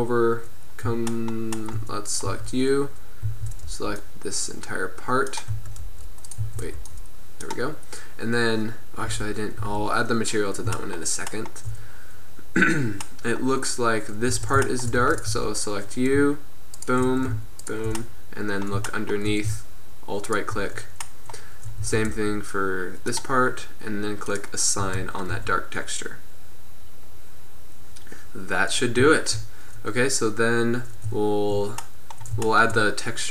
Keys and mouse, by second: 2.3 Tab, 3.3 a, 3.7 b, 5.6 z, 5.9 b, 6.5 a, 7.0 b, 9.2 Tab, 9.6 z, 14.4 Tab, 15.1 Tab, 15.4 Tab, 21.8 z, 22.2 b, 24.3 click, 24.9 z, 25.2 drag, 25.5 Tab, 25.5 click.